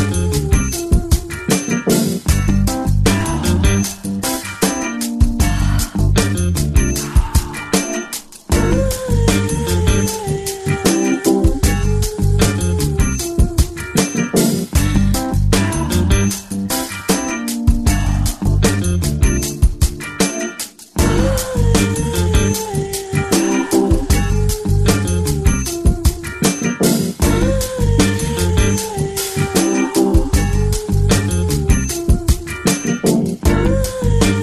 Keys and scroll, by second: 1.0 ctrl+=, 1.1 -, 1.1 -, 1.2 -, 1.9 =, 3.3-3.7 typing, 4.8 space, 7.2 ctrl+alt+super+space, 10.5 space, 10.6 space, 11.4 ctrl+Return, 11.6 space, 19.5 5, 26.6 ctrl+space, 29.4 space, 29.9 space, 31.8 space, 32.3 space.